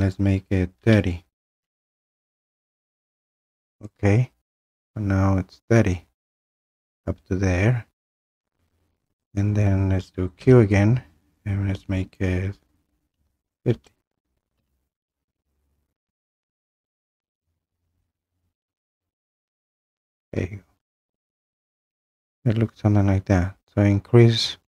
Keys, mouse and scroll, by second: 0.8-2.0 typing, 3.9 click, 4.7-8.8 drag, 10.4 q, 13.1-15.0 typing, 19.3 click, 20.8-22.0 scroll.